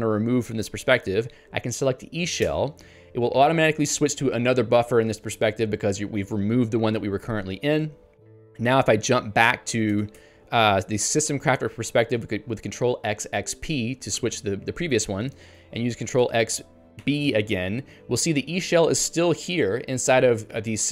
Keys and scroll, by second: 2.5 Return.